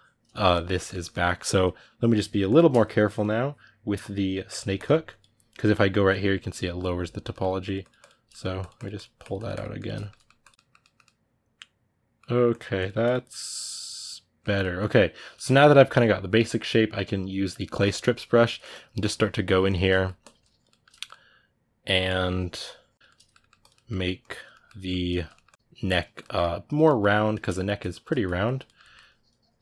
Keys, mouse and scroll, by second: 1.9 g, 2.2 click, 2.5 middle click, 2.9-6.8 drag, 6.8 ctrl+z, 7.1 ctrl+middle click, 7.4 click, 8.1 ctrl+middle click, 8.4-9.8 drag, 9.8 ctrl+middle click, 10.2 click, 10.3-12.3 middle drag, 12.3 click, 13.1-17.3 middle drag, 17.3 click, 17.6 ctrl+middle click, 17.9 click, 18.3 ctrl+middle click, 18.5-19.5 drag, 19.5 ctrl+middle click, 20.0 click, 20.5-21.8 ctrl+middle drag, 21.8-22.9 drag, 22.9 ctrl+middle click, 23.4 click, 23.5 middle click, 24.0 click, 24.3 middle click, 24.7 ctrl+click, 24.9 ctrl+middle click, 25.3 ctrl+click, 26.0 middle click, 26.5 click, 26.6 ctrl+middle click, 27.6 ctrl+click, 27.9 ctrl+middle click, 28.2 click, 28.4 ctrl+middle click, 28.9 click, 29.5 middle click.